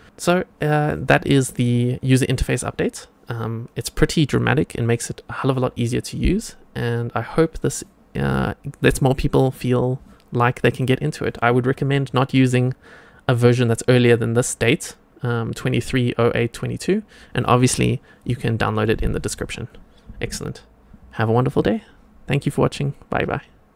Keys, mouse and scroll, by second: 0.0 click.